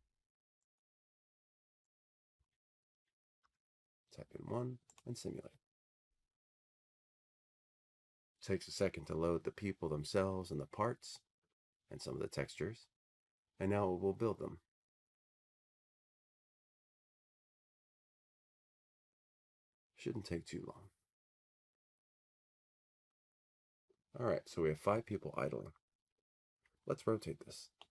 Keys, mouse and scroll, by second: 0.9 click, 0.9 1, 2.6 click, 3.4 1, 5.1 click, 7.1 click, 26.7-27.9 drag.